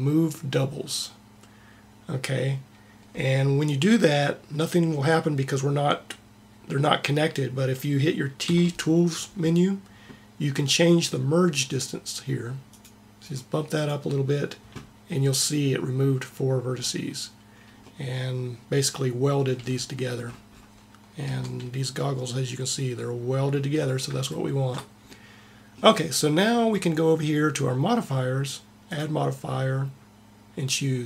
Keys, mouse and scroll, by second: 8.3 t, 12.5 click, 13.0 click, 16.0 middle click, 16.7-17.8 middle drag, 18.4 middle click, 19.4 a, 21.1 Tab, 28.8-31.0 drag.